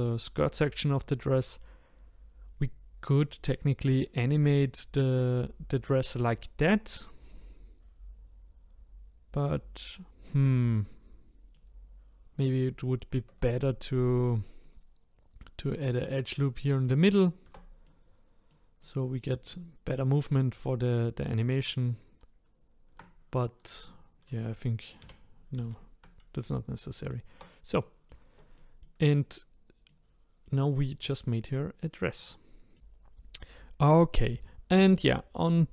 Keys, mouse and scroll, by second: 9.3-12.3 middle drag, 13.3 Tab, 14.6-16.4 drag, 16.4-17.4 middle drag, 17.4 Tab, 17.8-22.6 middle drag, 25.0 ctrl+z, 25.6 ctrl+z, 26.4 click, 26.8 middle click, 27.3 Tab, 27.8-30.1 middle drag, 30.1-30.4 scroll down 3, 30.4-32.2 middle drag, 32.2 click, 32.7-35.7 middle drag.